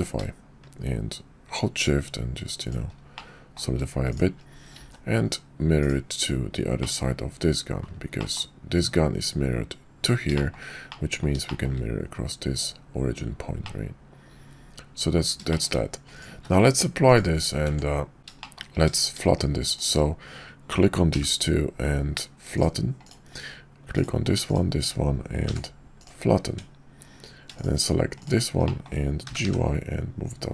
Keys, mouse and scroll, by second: 3.1-3.6 drag, 4.8 alt+x, 6.8 drag, 8.2 click, 10.4 shift+drag, 10.9-11.2 middle drag, 11.4 shift+middle drag, 13.6-15.2 middle drag, 15.5 shift+middle click, 16.3 q, 17.7 Tab, 18.4 shift+click, 19.7 shift+click, 21.1 y, 25.4 y, 28.6 click, 29.2 g.